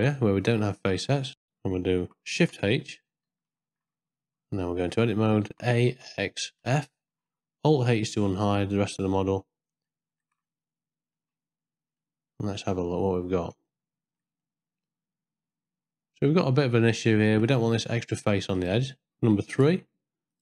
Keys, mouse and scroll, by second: 1.5 ctrl+z, 3.3 shift+h, 4.8 Tab, 5.4 a, 5.9 x, 8.1 alt+h, 9.8 middle click, 10.5 ctrl+middle click, 11.1 ctrl+scroll up 1, 12.0 scroll up 1, 12.1 middle click, 12.7 scroll down 1, 13.7 ctrl+scroll up 1, 13.8 ctrl+middle click, 14.4-16.4 middle drag, 16.9 shift+middle click, 18.1 click, 18.6 click, 19.6 3.